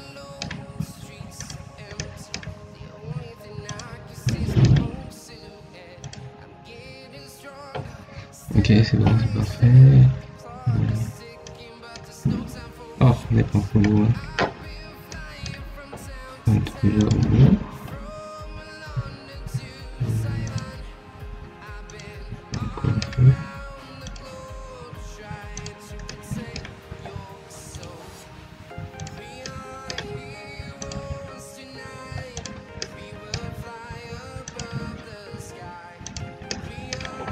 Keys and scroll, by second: 9.1 Escape.